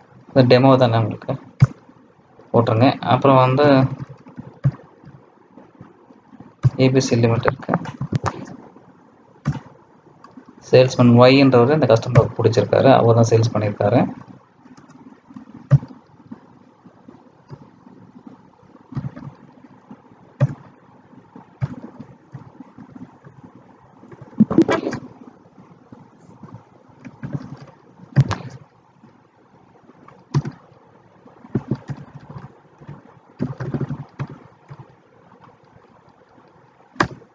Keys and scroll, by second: 8.0 ctrl+a.